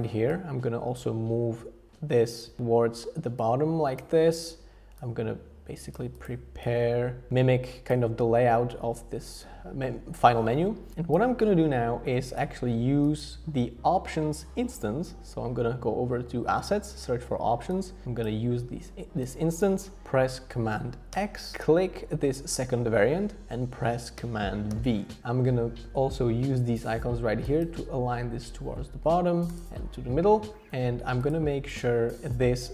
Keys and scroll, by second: 21.1 super+x, 24.7 super+v.